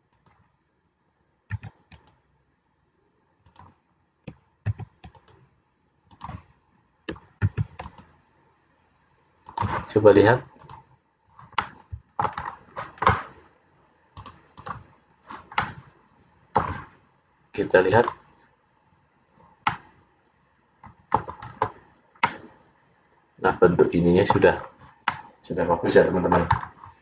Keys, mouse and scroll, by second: 1.6 ctrl+r, 5.3 ctrl+r, 7.5 ctrl+r, 11.0 click, 11.6 middle click, 12.5 scroll down 3, 14.2 click, 15.6 middle click, 18.0 click, 19.8 middle click, 21.6-22.3 scroll up 3, 22.3 middle click, 22.3-22.8 scroll up 1, 24.8-25.2 scroll down 4, 25.2 middle click, 26.7-27.0 scroll down 2.